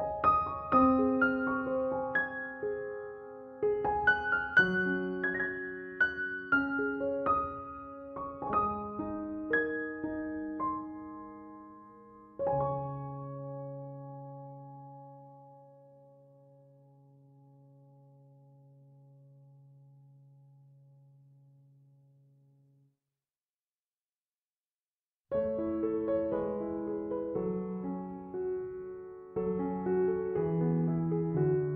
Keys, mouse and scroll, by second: 10.3 Escape, 20.5 3, 20.9 Return.